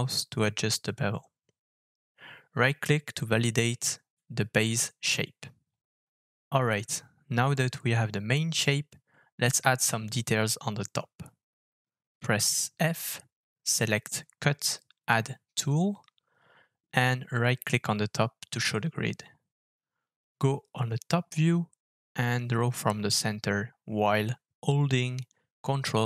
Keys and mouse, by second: 4.7 KP_Decimal, 5.9-8.7 middle drag, 9.1-10.0 shift+middle drag, 11.4 alt+f, 19.9-26.0 middle drag, 21.5 KP_7.